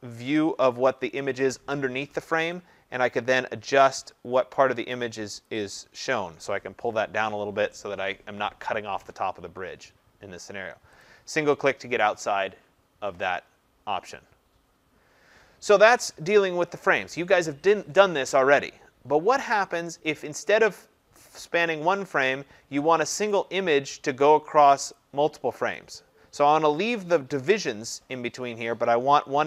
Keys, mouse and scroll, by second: 5.4 click, 11.0 click, 23.3 click, 24.2 click, 24.9 click, 25.7 click.